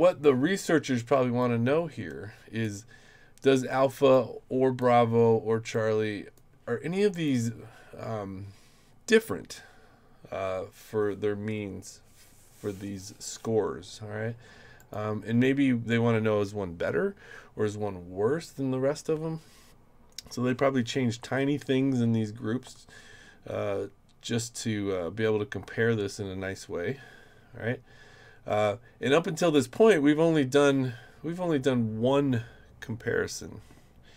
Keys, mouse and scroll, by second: 1.4-2.6 drag, 4.1 click, 5.7 click, 7.1 click, 14.8 click, 29.4 click.